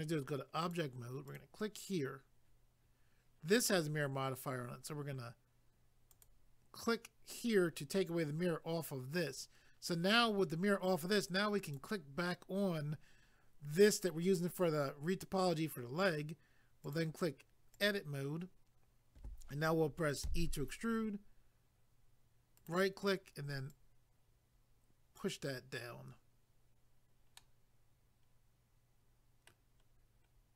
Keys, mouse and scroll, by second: 0.1 click, 0.6 click, 0.8 double click, 1.3 click, 6.1 click, 6.2 click, 11.7 click, 11.8 click, 16.8 click, 17.0 click, 17.7 click, 17.8 click, 22.5 right click, 22.7 right click, 23.7 click, 27.4 middle click, 29.9-30.3 scroll down 1.